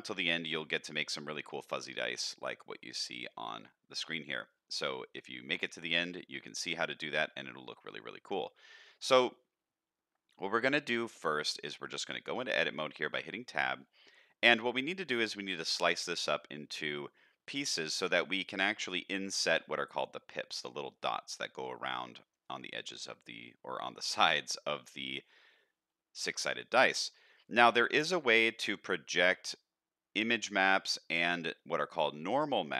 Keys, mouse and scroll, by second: 0.5-1.0 middle drag, 1.3 middle click, 2.6-3.2 middle drag, 3.4-3.9 middle drag, 4.2-4.6 middle drag, 4.8-5.5 middle drag, 5.7-8.3 middle drag, 8.5 scroll up 1, 8.8 middle click, 9.3-10.4 middle drag, 12.3 Tab, 12.8-13.3 middle drag, 13.5-13.9 shift+middle drag, 14.1-14.4 middle drag, 17.9 middle click, 19.6 middle click, 21.3-23.4 middle drag, 23.8 middle click, 24.7 middle click, 25.5-26.2 middle drag, 26.4 middle click, 27.1 middle click, 28.2 middle click, 31.5 middle click.